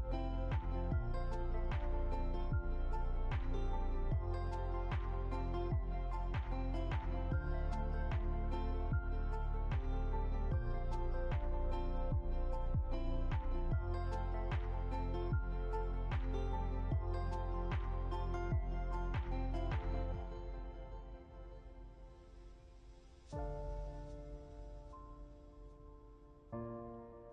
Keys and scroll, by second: 1.3 Left, 2.3 Down, 11.2 ctrl+0, 14.3 ctrl+alt+2.